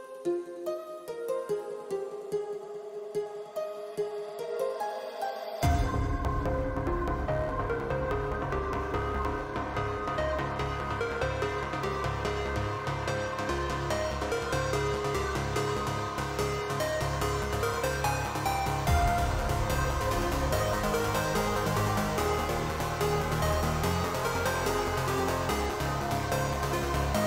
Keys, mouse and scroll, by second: 1.3 shift+middle click, 2.1 shift+middle drag, 5.1-6.3 drag, 7.1-9.9 drag, 10.6 shift+middle click, 10.9 shift+middle click, 11.5 shift+middle click, 14.3 shift+middle click, 15.7-19.4 drag, 23.2 shift+middle drag, 23.9 shift+middle click, 24.8 click, 25.4-27.0 drag.